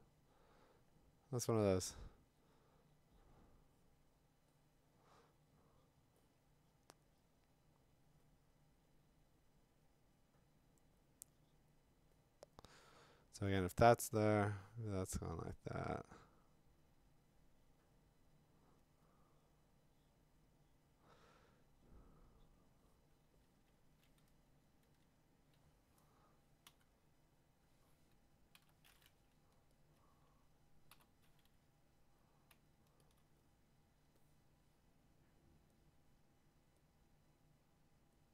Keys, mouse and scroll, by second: 23.7 [, 24.2-25.0 ], 25.1 ], 26.7 5, 28.5 b, 29.8 ctrl+click, 30.9 b, 33.2 alt+click, 35.8 click, 36.9 click, 38.2 click.